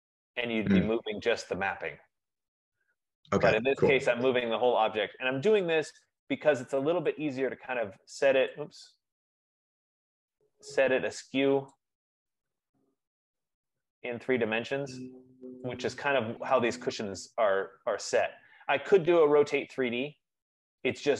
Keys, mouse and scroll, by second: 5.9 click, 8.8 click, 11.0 click, 11.8 click, 14.0 click, 15.8 click, 16.7 click, 19.4 right click, 20.3-21.1 scroll.